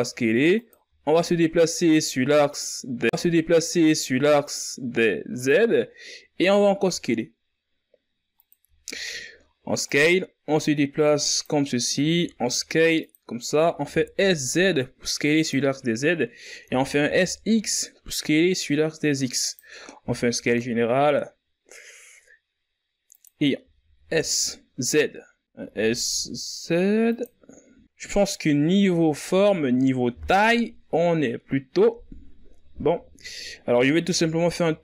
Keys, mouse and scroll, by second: 0.9 z, 1.8-2.3 scroll up 4, 2.6 s, 4.0-5.4 shift+scroll up 4, 5.4-6.8 drag, 6.8 scroll up 4, 7.4 s, 9.7-10.8 ctrl+scroll up 3, 10.8-13.0 drag, 13.0 s, 14.6 s, 21.0 s, 24.6 s, 28.7-29.0 scroll down 6, 29.5-29.8 scroll up 4, 29.8 z, 29.9-30.8 scroll down 5, 30.8-31.5 scroll up 6, 31.5 KP_3, 33.7 s.